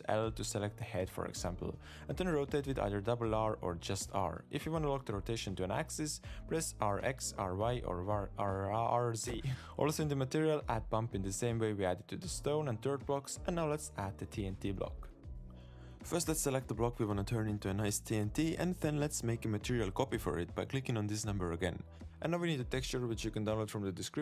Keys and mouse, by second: 0.2 alt+a, 1.0 l, 1.3 l, 2.5 r, 5.7 l, 6.2 r, 9.5 g, 9.6-10.3 drag, 10.8 click, 12.2 shift+a, 14.4 click, 16.6 Tab, 16.8 Tab, 17.2 Tab, 17.2 click, 17.5 Tab, 17.6 click, 17.7 Tab, 19.0 shift+middle click, 19.5 shift+middle click, 19.7 Tab, 22.0 click, 22.3 click, 24.1 click.